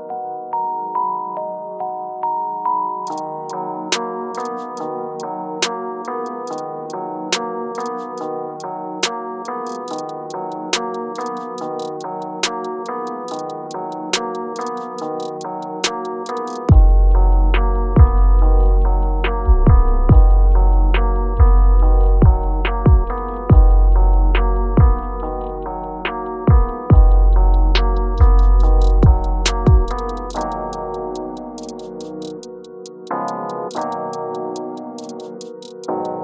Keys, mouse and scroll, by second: 0.6-3.2 drag, 3.2 shift+scroll up 1, 4.2-5.4 drag, 5.4-7.3 alt+scroll up 2, 7.9-12.0 drag, 12.0 shift+scroll up 1, 13.0-15.1 shift+drag, 15.1-17.0 shift+drag, 17.0 ctrl+z, 17.5 click, 18.1 alt+scroll down 1, 18.8 shift+scroll down 1, 19.8-20.2 shift+scroll up 1, 20.2-23.2 drag, 23.2 space, 26.9 scroll down 1, 28.4-30.4 drag, 31.5-33.3 shift+drag, 34.7-36.2 shift+drag.